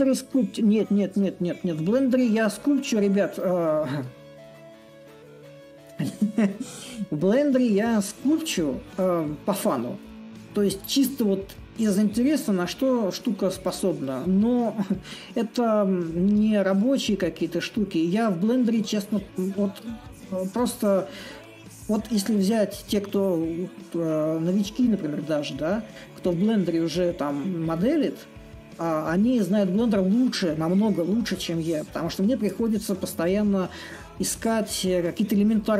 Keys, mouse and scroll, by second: 6.1-8.1 middle drag, 8.9-16.9 middle drag, 14.0 scroll, 16.9-34.0 drag, 35.6-35.7 drag.